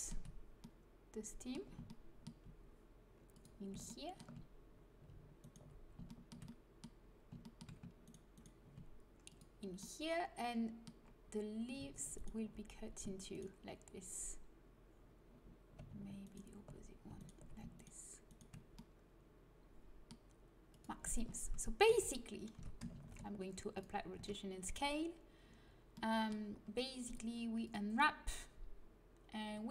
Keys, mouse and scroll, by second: 0.5-1.6 middle drag, 3.2-5.3 drag, 5.3-9.9 middle drag, 9.2-11.3 drag, 9.2 right click, 12.0-15.1 right drag, 16.1-18.4 right drag, 21.4 a, 21.5-22.5 drag, 21.8 a, 22.5 Tab, 22.9 ctrl+a, 24.1 Tab, 26.9-29.7 drag.